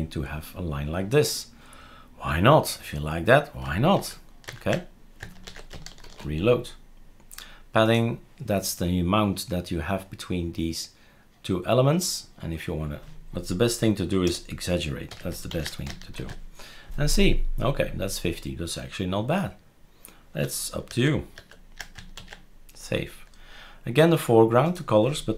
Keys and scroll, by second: 3.9 ctrl+z, 4.5 ctrl+z, 5.4 ctrl+s, 6.1 shift+super+f, 14.2 BackSpace, 15.1 5, 15.5 ctrl+s, 16.1 shift+super+r, 20.9 ctrl+z, 21.3 ctrl+z, 22.2 ctrl+s.